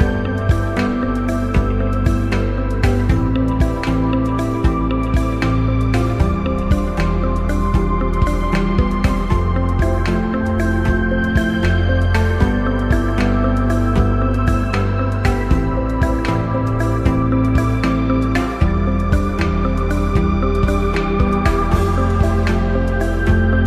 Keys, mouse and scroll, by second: 0.2 click, 2.0 click, 2.6-4.0 alt+shift+drag, 6.9 click, 8.6 click, 10.5 click, 13.3 click, 16.0 click, 18.4 click, 19.8 shift+click, 21.9 click.